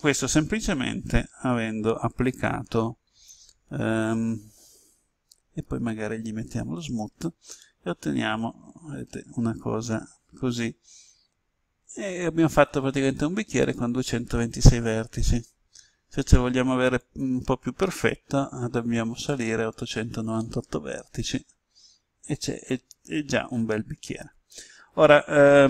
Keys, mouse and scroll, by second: 4.1 Tab, 6.6 click, 7.6-11.0 middle drag, 16.9-18.0 drag, 20.4-25.6 middle drag.